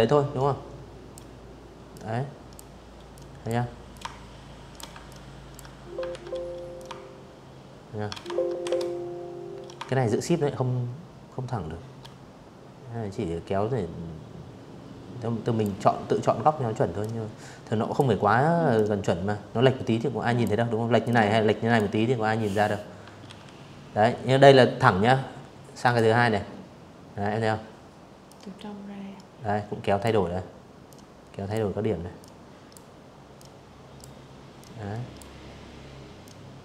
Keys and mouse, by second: 0.8 click, 1.6 shift+click, 2.7 ctrl+click, 3.7 ctrl+z, 4.4-13.3 shift+drag, 14.7 click, 16.4-18.1 drag, 18.7 click, 20.9 ctrl+z, 23.5 click, 25.9-27.7 drag, 28.5 click, 29.9 click, 31.0 click, 32.2 click, 33.9 click, 34.7 click, 35.7 click.